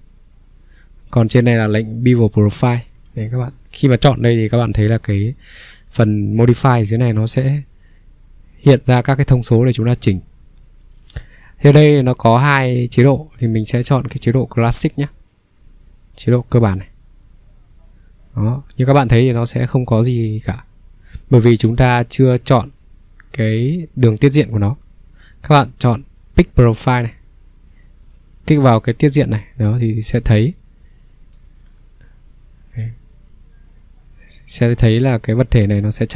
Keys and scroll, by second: 2.9 ctrl+3, 9.5 Escape, 14.0 ctrl+3, 14.6 ctrl+3, 15.6 Escape, 21.7 ctrl+3, 24.8 Escape.